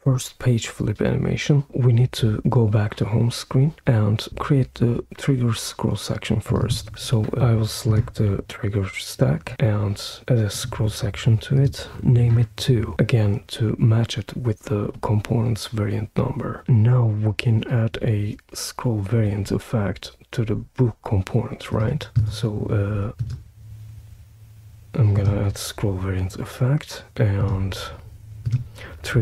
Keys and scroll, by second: 11.9 Return.